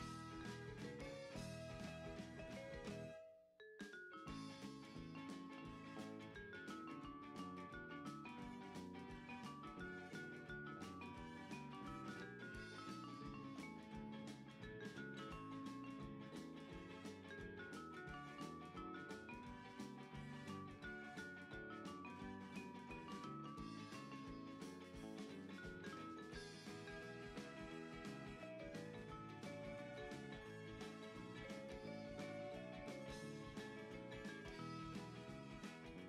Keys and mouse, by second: 0.1 s, 1.5 click, 1.9 Tab, 2.9 e, 6.4 click, 7.5 right click, 7.8 r, 12.0 click, 14.6 middle click, 16.7 click, 19.3 click, 19.9 Tab, 20.7 KP_1, 21.7 shift+middle click, 24.3 KP_3, 25.2 r, 26.6 click, 27.1 Tab, 28.1 Tab, 29.5 click, 31.5 alt+shift+click, 33.9 g.